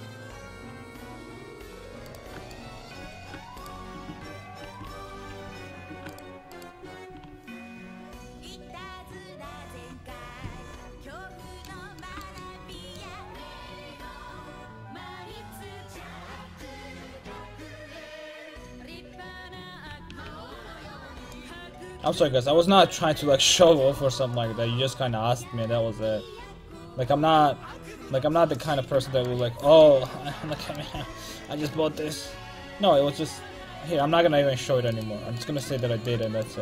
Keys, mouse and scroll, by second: 2.6 middle click, 3.6-5.5 right drag, 4.9 ctrl+x, 5.5 ctrl+z, 6.1-7.1 right drag, 7.1 a, 7.2 a, 10.4 z, 15.6-20.1 drag, 19.7 a, 20.1 a, 22.3 alt+z, 23.3 a, 23.7 a, 24.0 c, 29.1 middle click, 29.9 middle click, 30.6 middle click, 30.9 c, 35.1-36.6 middle drag.